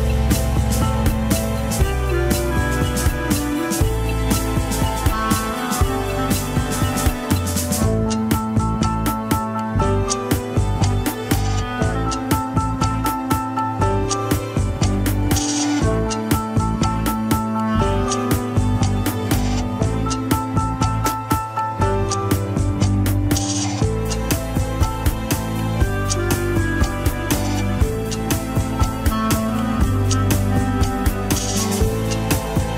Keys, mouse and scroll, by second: 0.2 shift+middle click, 0.5-1.3 scroll up 2, 1.3 a, 1.6 alt+r, 1.9 alt+g, 3.2 ctrl+click, 3.2 alt+z, 3.7 scroll down 2, 4.0 alt+z, 4.2-8.5 middle drag, 8.5 click, 9.1-9.6 scroll down 2, 9.6 click, 10.4-13.8 middle drag, 13.8 alt+z, 14.6 ctrl+click, 15.3 ctrl+click, 16.3 alt+z, 16.5 middle click, 17.0 alt+z, 17.8 ctrl+click, 18.2 alt+z, 18.4-22.6 middle drag, 22.6 KP_1, 22.8 scroll up 2, 23.0 Tab, 23.9 scroll down 2, 24.2 shift+middle click, 25.2 scroll down 3, 25.6 alt+h, 26.5 alt+z, 26.8 alt+z, 27.1 g, 28.3-29.1 scroll up 6, 29.1 Tab, 29.5-30.0 scroll up 2, 30.2 Tab, 31.0 click, 31.6 Tab.